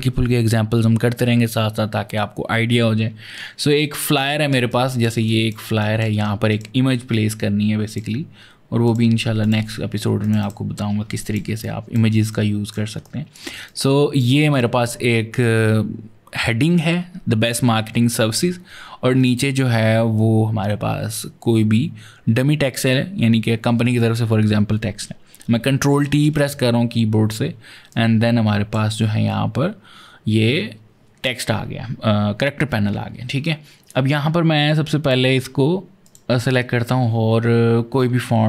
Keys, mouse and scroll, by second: 4.4 ctrl+space, 4.5 ctrl+click, 4.9 ctrl+space, 5.4 space, 5.6 click, 7.7 click, 8.7 click, 9.2 click, 10.0 click, 10.2 double click, 11.0 ctrl+click, 11.8 space, 12.1 ctrl+click, 13.4 ctrl+click, 19.0 click, 26.4 t, 27.7 click, 34.8 click, 35.9 click, 37.9-38.4 scroll up 14.